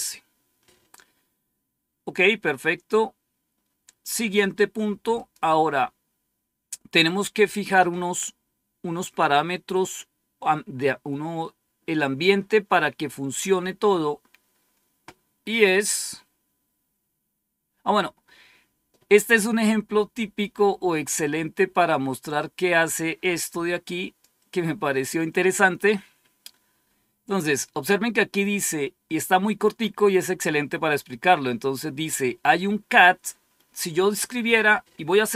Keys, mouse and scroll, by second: 1.6-2.8 scroll down 1, 2.8-3.3 scroll down 1, 5.1 click, 22.9-25.5 drag, 34.0 click.